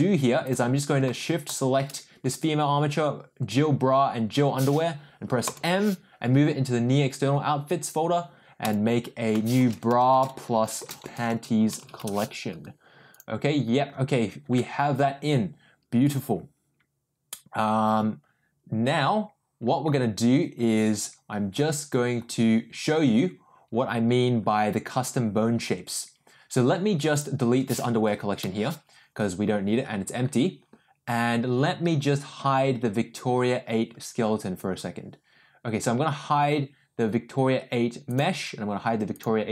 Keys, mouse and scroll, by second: 0.4 click, 1.4 shift+click, 5.4 m, 27.1 click, 28.6 Delete, 38.0 click, 39.1 click.